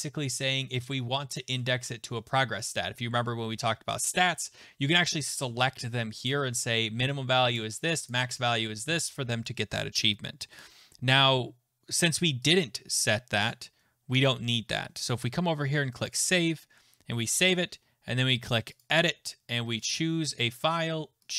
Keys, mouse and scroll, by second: 1.4 click, 4.0 click, 5.0 click, 6.3 click, 8.1 click, 12.5 click, 13.5 click, 16.1 click, 18.8 click, 19.9 click.